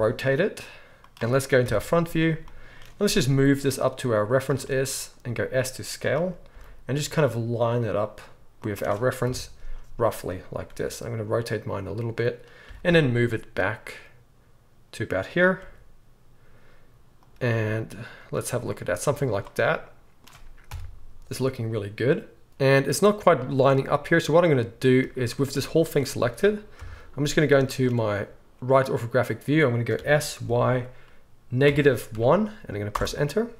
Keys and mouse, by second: 1.6 KP_1, 1.7-5.2 middle drag, 3.2 g, 5.2-13.7 right drag, 5.2 s, 6.5 g, 9.2 KP_3, 10.6 r, 12.6 g, 13.7-19.9 drag, 15.6 r, 17.5 g, 19.1 z, 19.9-24.6 middle drag, 20.7 KP_1, 24.6-33.5 drag, 25.5 Tab, 26.2 a, 26.8 KP_3, 29.9 s.